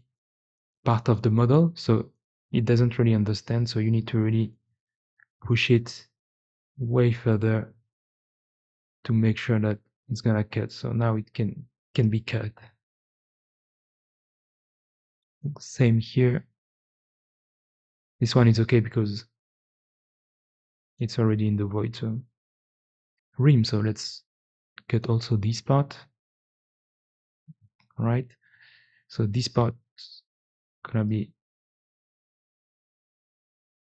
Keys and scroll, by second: 3.0 g, 3.8 d, 3.9 v, 8.0 4, 9.1 c, 10.5 x, 11.9 c, 13.6 4, 14.7 x, 17.4 4, 19.1 c, 20.9 x, 22.3 x, 24.3 c, 27.0 x, 29.3 alt+x, 30.5 f, 32.5 Escape, 33.2 alt+x.